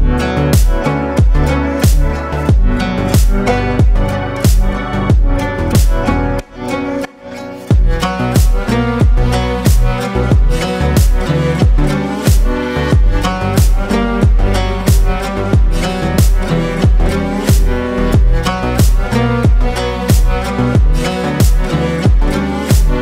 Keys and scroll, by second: 5.4 ctrl+space, 10.3 ctrl+space.